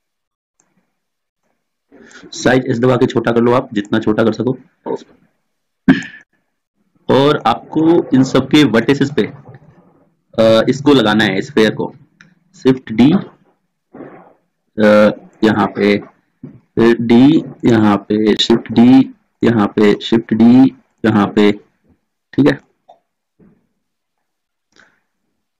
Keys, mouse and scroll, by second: 2.9 s, 6.7-8.3 middle drag, 13.1 shift+d, 15.9 click, 17.2 shift+d, 18.5 shift+d, 21.5-22.7 drag, 22.7-24.5 middle drag, 25.2 click.